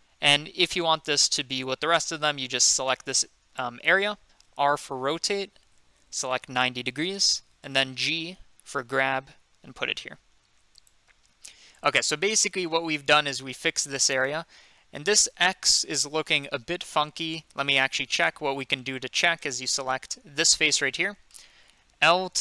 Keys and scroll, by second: 4.6 r, 6.0-7.0 typing, 7.1 Return, 8.7 g.